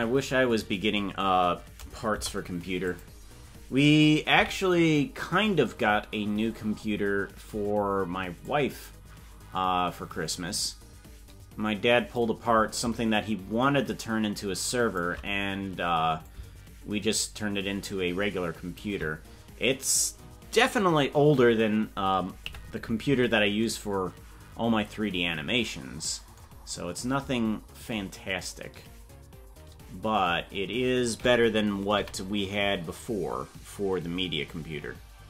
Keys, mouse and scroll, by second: 4.4 KP_Decimal, 6.0-6.5 scroll down 8, 7.0 scroll down 1, 8.4-12.3 drag, 13.1-15.1 shift+drag, 16.2-18.9 shift+drag, 22.5 KP_Decimal.